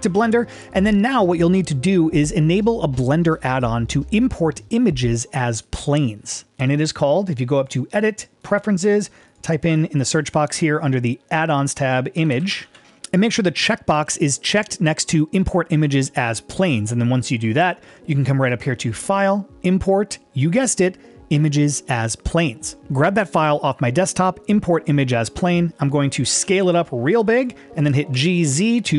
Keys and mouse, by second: 0.7 click, 7.6-8.6 drag, 18.8-22.5 drag, 26.4 s, 27.4 click, 28.2 g, 28.5 z.